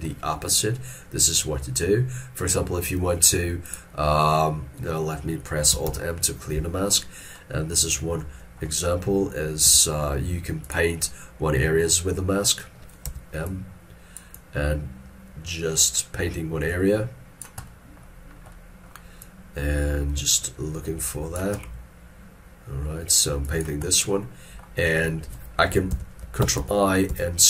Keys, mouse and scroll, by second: 5.9 alt+m, 7.0 middle click, 13.1 m, 17.7 middle click, 25.8 middle click, 26.6 ctrl+i.